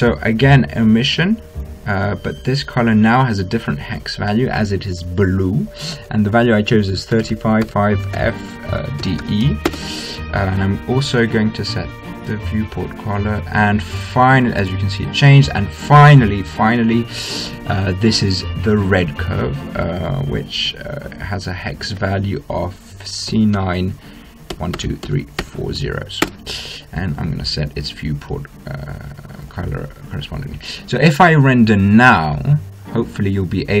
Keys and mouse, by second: 0.2-2.9 drag, 3.1 middle click, 3.3-5.1 drag, 5.1-11.8 middle drag, 11.8-13.7 drag, 13.8-15.2 middle drag, 15.2 right click, 15.8-20.1 drag, 21.3-23.1 drag, 25.3 0, 28.3-30.3 drag, 30.3-32.3 middle drag, 32.3-33.8 drag.